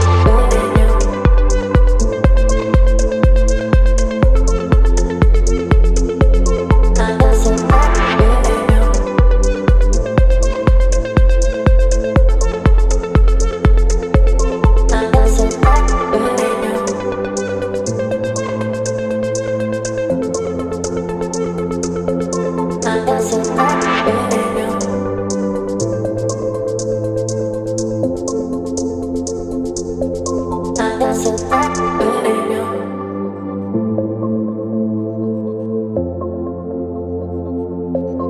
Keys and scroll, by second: 0.6 ], 2.2 x, 5.1 v, 13.0 ctrl+i, 14.7 b, 15.3 [, 16.1 [, 16.5 space, 18.4 x, 19.2 [, 22.4-25.4 typing, 30.4 space, 31.1 v.